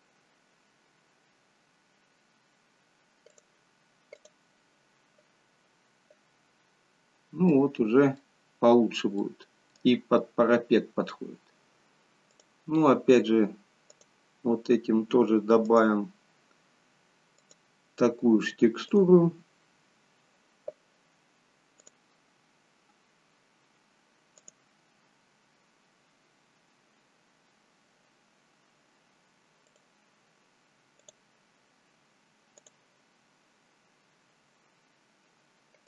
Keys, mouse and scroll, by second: 6.7-8.4 scroll up 1, 8.4 middle click, 8.4-9.3 scroll up 1, 9.3 middle click, 9.3 scroll down 2, 10.5-11.3 scroll down 2, 11.3-12.3 scroll up 1, 12.4 click.